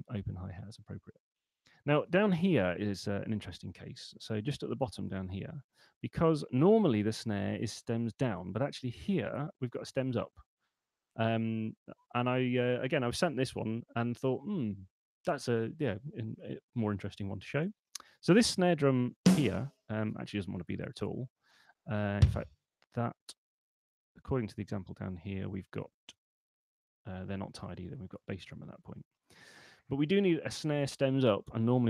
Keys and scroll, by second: 20.1 BackSpace, 26.5 u.